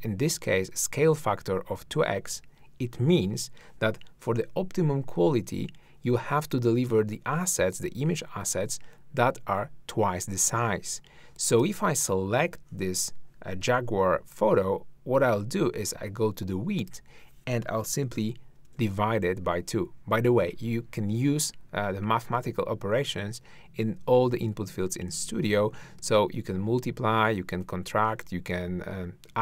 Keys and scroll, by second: 18.4-19.2 typing.